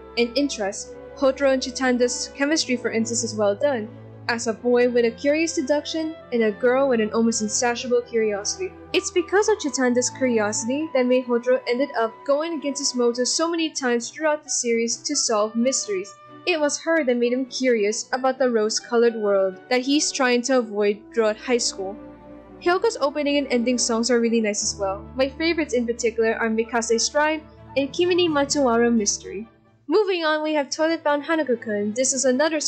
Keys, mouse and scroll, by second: 1.3 ctrl+=, 7.6 ctrl+z, 7.9 ctrl+z, 8.6 ctrl+-, 9.2 ctrl+z, 9.4 ctrl+z, 10.3 c, 14.9 ctrl+=, 15.8 ctrl+=, 17.0 ctrl+-, 17.6 ctrl+z, 20.3 ctrl+z, 20.7 ctrl+z, 20.9 ctrl+z, 23.5 ctrl+=, 28.8 scroll, 29.3 ctrl+-, 29.4 ctrl+-, 29.9 ctrl+-, 31.1 ctrl+-, 31.7 ctrl+=.